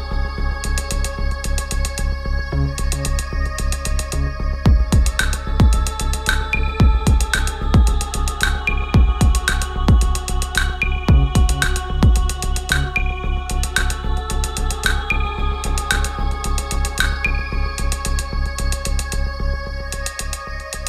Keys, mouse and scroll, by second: 7.9 BackSpace, 13.2 click, 17.5 ctrl+a, 19.5 BackSpace.